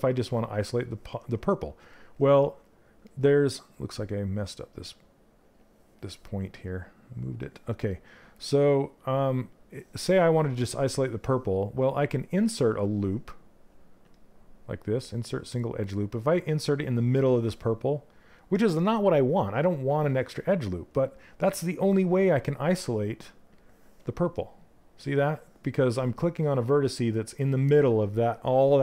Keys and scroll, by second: 12.4 space.